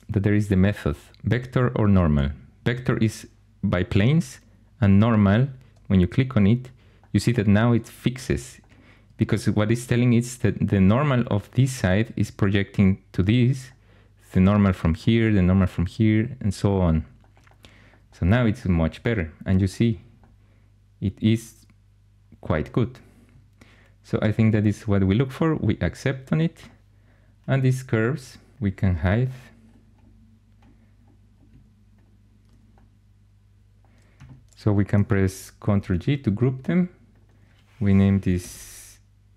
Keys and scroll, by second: 35.5 ctrl+g, 38.3-39.3 typing.